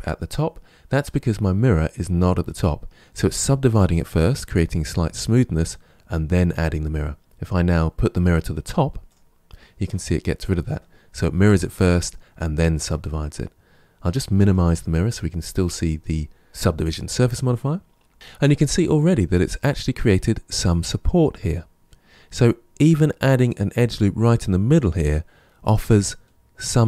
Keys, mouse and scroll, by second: 8.9 click, 14.3 click, 17.8-18.1 scroll down 2, 18.1-20.3 shift+middle drag.